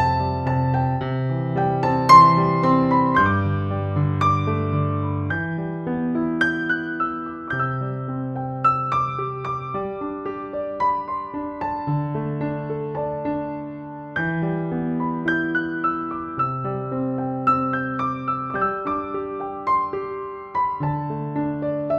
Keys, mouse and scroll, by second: 0.0-21.9 typing, 2.5 ctrl+z, 2.8 alt+click, 3.4 scroll up 1, 3.6 click, 3.8 click, 4.3 alt+click, 5.3 click, 5.6 click, 6.7 click, 7.6 alt+click, 7.9 click, 9.7 alt+click, 10.1 click, 10.6 ctrl+-, 10.8 click, 11.1 ctrl+=, 11.5 click, 11.7 click, 12.9 click, 14.2 click, 14.8 alt+click, 17.9 click, 19.7 click, 20.0 alt+click, 21.4 click.